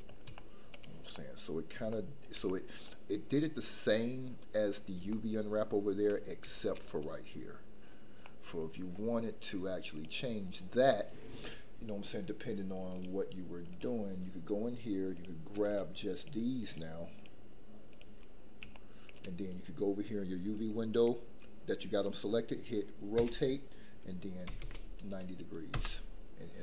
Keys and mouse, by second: 0.3 shift+middle drag, 1.1 middle click, 1.9-2.2 shift+middle drag, 2.4 middle click, 5.1-5.9 shift+middle drag, 8.2-8.6 middle drag, 10.0 click, 13.0-13.8 drag, 15.7 shift+click, 16.1 shift+click, 18.8 shift+middle click, 23.1 r, 24.4 KP_9, 24.6 KP_0, 25.7 KP_Enter.